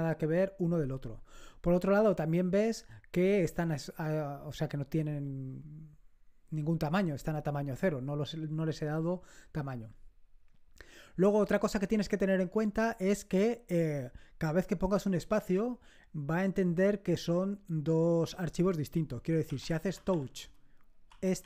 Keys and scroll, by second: 19.2-21.4 typing.